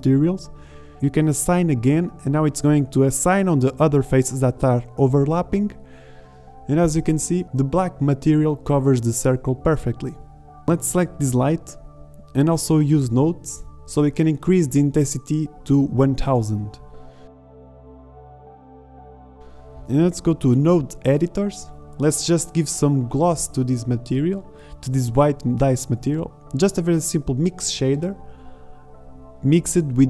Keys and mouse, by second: 0.0 shift+z, 3.3 middle click, 5.7 click, 5.8-6.4 middle drag, 7.0 z, 7.7 z, 8.1 Tab, 8.8 middle click, 10.2-11.2 drag, 11.3 click, 12.6-14.7 drag, 15.8 shift+z, 16.9-19.0 drag, 18.1 Left, 21.2 click, 21.4 click, 21.9 click, 22.5 click, 23.0 click, 27.5 shift+a.